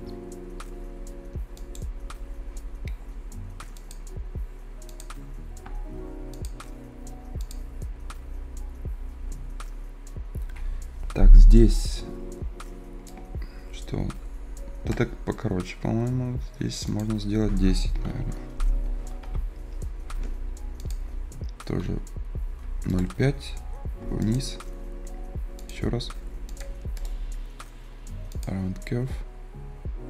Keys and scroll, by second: 25.5 Return.